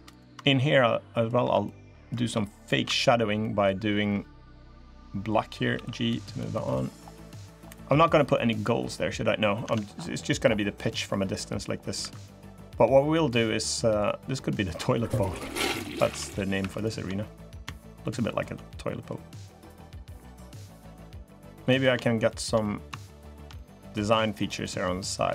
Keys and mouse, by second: 0.2 middle click, 1.0 click, 1.4 click, 1.7 middle click, 3.2 click, 5.7 g, 7.0 click, 9.4 Tab, 10.6 middle click, 11.1 middle click, 11.8 3, 12.1 click, 12.3 middle click, 13.1 middle click, 14.3 middle click, 15.1 2, 15.5 click, 15.8 Tab, 16.3 2, 16.6 click, 17.0 middle click, 18.4 middle click, 19.3-20.7 drag, 20.9 middle click, 22.0 shift+click, 22.4 middle click, 23.1 shift+click, 23.3 middle click.